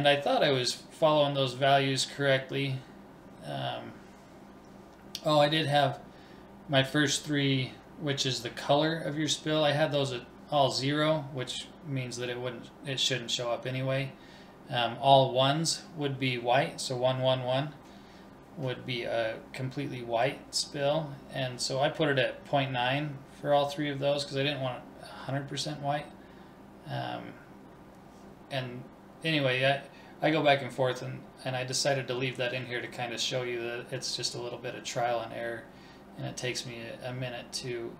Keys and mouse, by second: 8.6 ctrl+s, 26.3-28.2 drag, 30.6 ctrl+s, 32.3-33.9 middle drag, 33.9-36.9 drag.